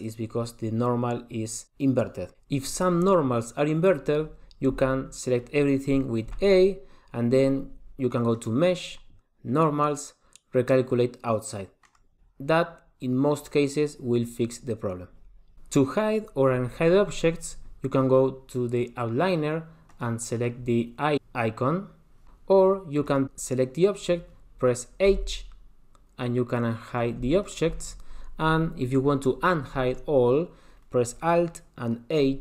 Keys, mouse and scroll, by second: 2.5 Tab, 4.9 Tab, 6.5 a, 8.6 click, 19.9 click, 20.4 click, 21.2 click, 21.3 click, 23.2 click, 25.3 h, 27.1 click, 27.4 h, 27.6 click.